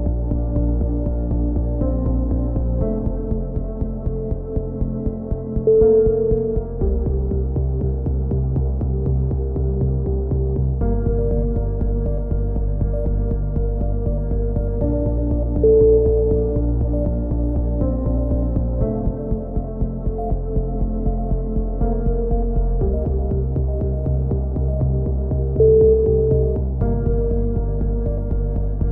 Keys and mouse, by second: 0.1 right click, 0.4 e, 1.2 KP_3, 1.5 click, 2.3 z, 2.4-5.1 drag, 3.3 KP_3, 3.7 z, 5.1 right click, 5.3 f, 5.4 a, 6.0 KP_7, 6.2 click, 6.8 right click, 6.9 e, 7.7 click, 8.8-10.0 drag, 11.4 e, 11.7-14.6 drag, 14.2 right click, 14.6 KP_3, 15.0 c, 15.2 right click, 15.5 click, 16.2 a, 16.3 z, 16.3 click, 17.6 click, 17.6 right click, 17.8 x, 18.2-19.6 drag, 18.6-19.8 right drag, 19.6 shift+q, 19.7 a, 20.2 click, 24.1 click, 24.9 KP_7, 25.0 z, 25.2 click, 25.6 right click, 26.1 e, 26.5 click, 27.5 click, 27.9 click, 28.5 click.